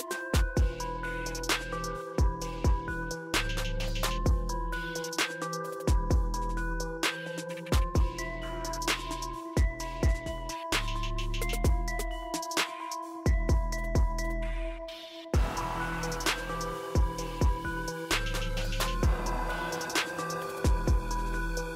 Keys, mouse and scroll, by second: 4.2 click, 5.8 typing, 8.1 click, 10.6 click, 19.7 click, 19.8 typing.